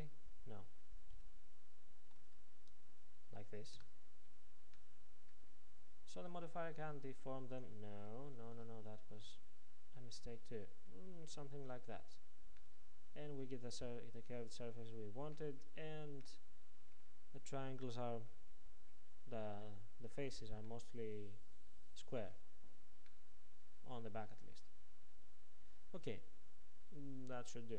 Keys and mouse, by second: 4.8-8.2 drag, 8.6 Tab, 9.5-11.3 drag, 12.7-15.2 middle drag, 15.7-25.3 middle drag.